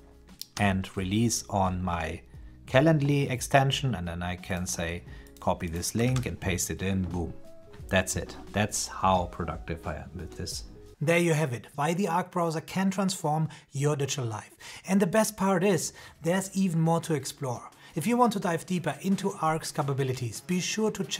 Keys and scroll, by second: 5.9 super+v.